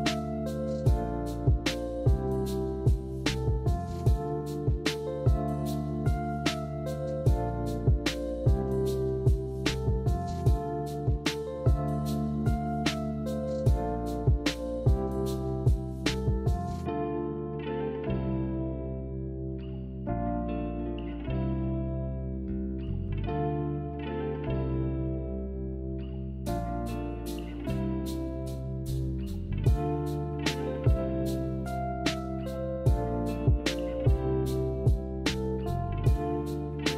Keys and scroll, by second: 12.1 z, 16.7 ctrl+z, 27.6 a, 28.6 Delete, 35.7 b, 36.6 Delete.